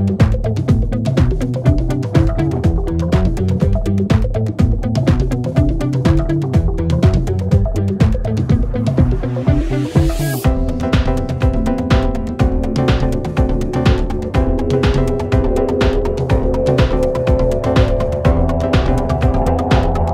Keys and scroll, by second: 7.1 Delete, 11.2 ., 12.5 4.